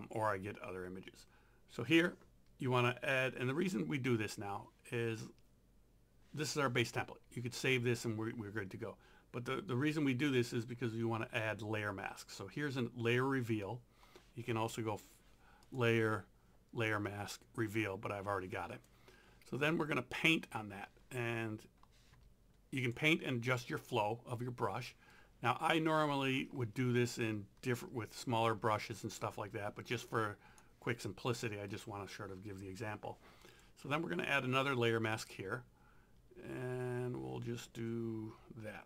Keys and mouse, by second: 10.5 click, 15.7 click, 18.7 click, 19.6 b, 22.8 click, 25.1 click, 31.7 click, 33.4 click, 35.2 click.